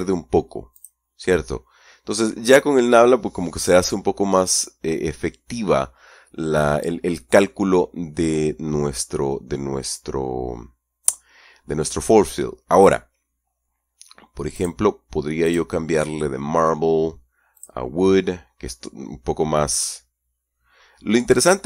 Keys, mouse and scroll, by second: 1.1 click, 14.9 click, 15.8 click, 17.9 click.